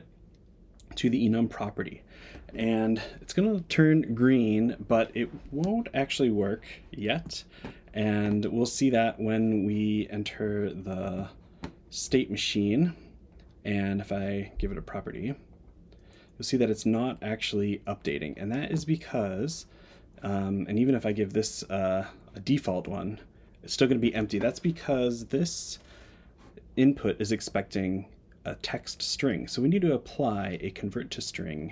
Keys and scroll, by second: 10.4 Tab.